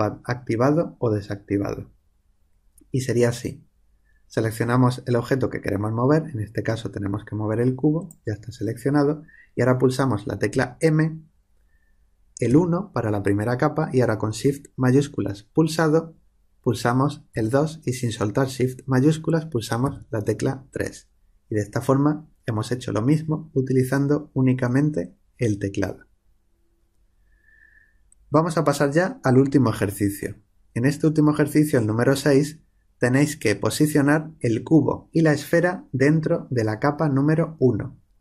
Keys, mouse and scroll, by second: 7.9-10.4 drag, 10.4 m.